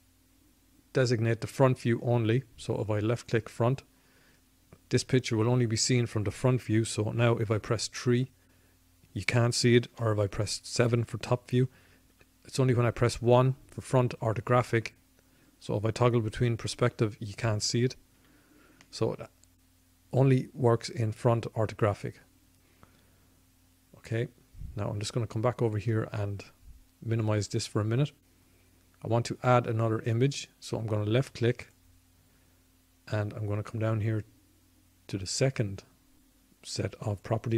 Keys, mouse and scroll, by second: 6.9 KP_3, 8.8 KP_7, 11.0 KP_1, 15.0 KP_5, 17.0 KP_5, 26.1-28.5 drag, 30.6-32.4 drag.